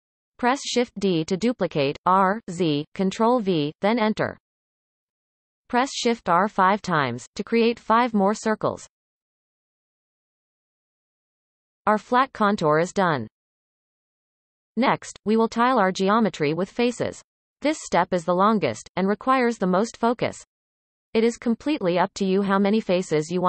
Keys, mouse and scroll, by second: 1.1 shift+d, 4.0-5.6 typing, 9.8-10.3 scroll down 2, 10.3-13.3 shift+middle drag, 13.3 Tab.